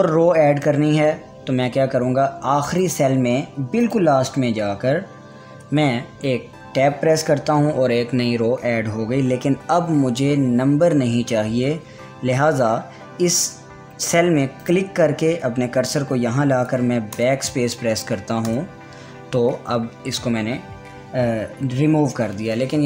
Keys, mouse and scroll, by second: 1.7-3.3 scroll down 1, 3.3 click, 6.0 Tab, 15.2 click.